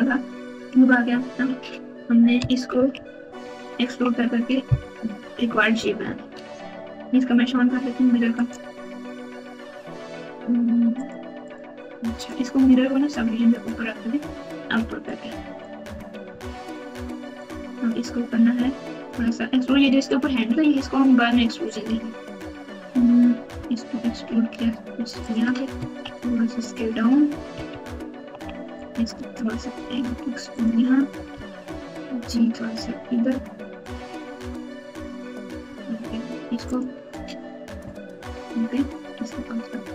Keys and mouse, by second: 2.9 ctrl+KP_2, 3.2 ctrl+KP_2, 3.8 ctrl+KP_2, 5.1 KP_Subtract, 5.3 KP_Subtract, 6.0 Tab, 8.3 click, 10.0 click, 10.9 click, 11.4 click, 12.1 click, 13.1 click, 15.0 click, 16.2 alt+z, 16.5 click, 16.7 click, 23.5 e, 25.7 s, 27.9 ctrl+KP_2, 28.4 ctrl+KP_2, 29.7 e, 31.3 g, 34.5 s, 35.6 g, 38.9 e.